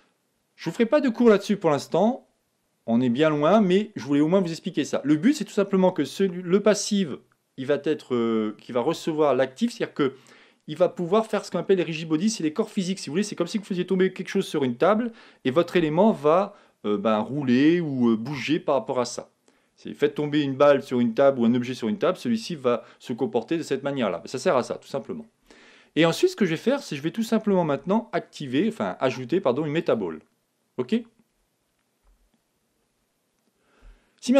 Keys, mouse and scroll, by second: 24.9 scroll down 1, 25.1-27.5 middle drag, 25.4-26.8 scroll up 1, 26.8 scroll up 1, 27.8 shift+a, 32.0 a.